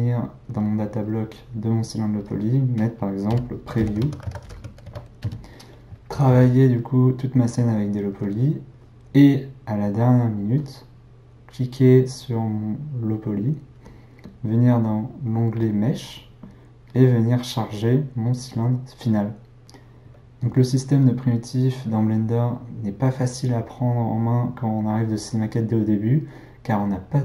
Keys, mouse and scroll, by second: 0.2 click, 0.9 click, 1.0-4.1 drag, 6.3 Tab, 13.4 click, 15.6 click, 16.9-19.6 drag.